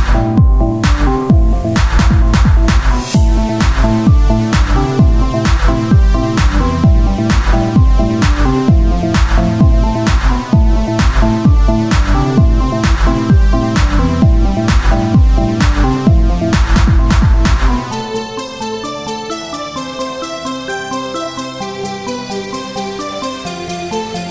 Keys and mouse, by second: 0.6-3.6 drag, 0.6 z, 0.9 z, 1.2 c, 1.8 z, 3.2 z, 3.7-5.7 drag, 4.3 z, 5.7-9.1 right drag, 7.0-9.1 drag, 10.1 Tab, 13.1 shift+d, 14.8-16.2 drag, 18.0 KP_1, 19.2-21.0 drag, 21.0 shift+d, 23.0 click, 23.5 r.